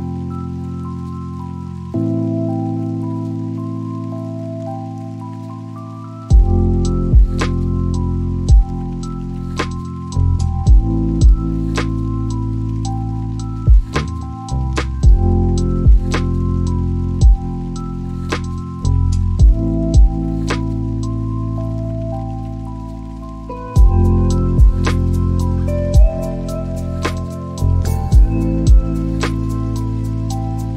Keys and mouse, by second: 1.0 click, 2.6 click, 8.9 click, 9.8 r, 11.2 z, 13.6 y, 22.8 ctrl+click, 24.8 g, 25.3 z, 27.7 Escape, 29.4 shift+a.